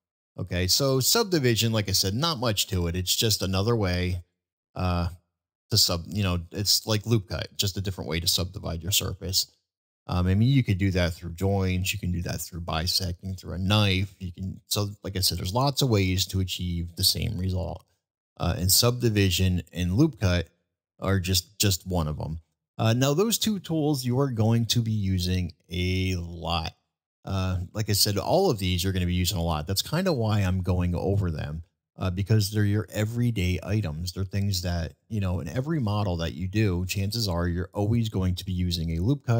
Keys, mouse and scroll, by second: 2.4-4.2 drag, 6.2 ctrl+z, 7.5 middle drag, 8.2-8.6 middle drag, 9.5 middle drag, 10.4-10.9 middle drag, 11.8 middle drag, 13.3-13.7 middle drag, 14.1-14.5 middle drag, 17.8 shift+middle drag, 18.5 middle drag, 20.0 shift+middle drag, 21.4-22.0 middle drag, 22.9-23.6 middle drag, 25.5-25.9 shift+middle drag, 26.3-26.7 shift+middle drag, 27.1 shift+middle drag, 27.8 middle drag, 28.4 shift+middle drag, 28.9 shift+middle drag, 29.5 shift+middle click, 33.0-33.3 middle drag, 33.8-34.2 middle drag, 35.4 shift+middle drag, 36.3-36.7 middle drag, 37.1 middle drag.